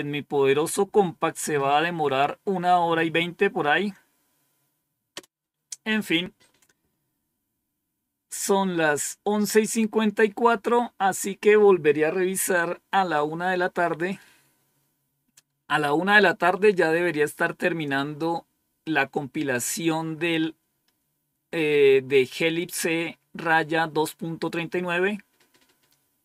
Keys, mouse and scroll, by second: 5.0 Return.